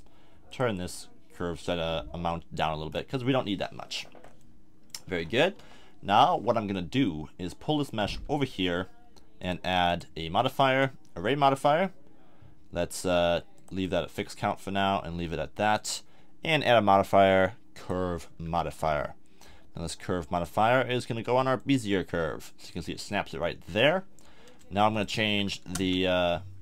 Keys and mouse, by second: 2.9-4.6 middle drag, 5.5 KP_7, 8.1 z, 8.8 middle click, 9.0 middle click, 9.4-17.9 drag, 18.3 z, 20.2-21.6 drag, 22.8-24.9 middle drag.